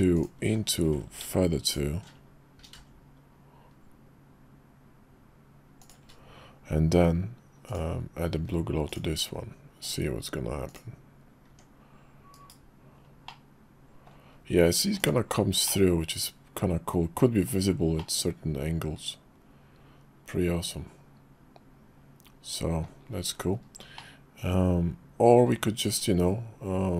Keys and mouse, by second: 0.1 alt+shift+click, 1.4 ctrl+alt+shift+z, 1.6 click, 3.0 ctrl+b, 7.7-8.7 drag, 8.9-10.3 drag, 10.7 click, 11.5 Tab, 12.4 /, 13.3 middle click, 15.0 click, 15.7-17.5 middle drag, 18.0-22.8 middle drag, 24.0-25.4 middle drag, 25.9 /.